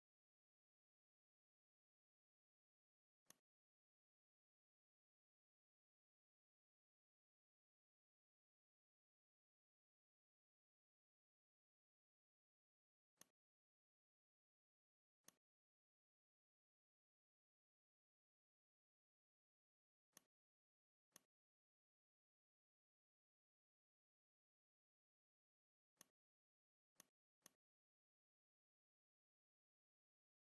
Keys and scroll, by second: 14.2 v, 17.6 shift+m, 22.4 v, 29.9 a.